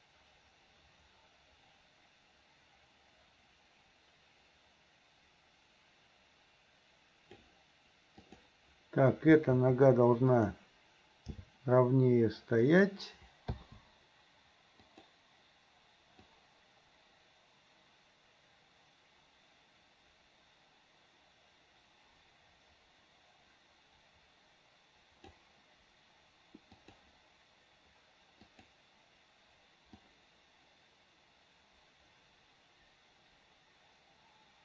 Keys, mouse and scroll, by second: 8.3 click, 9.6 r, 11.3 g, 13.6 i, 14.9 click, 16.3-25.4 drag, 26.8 click, 28.6 click, 30.1-34.6 drag.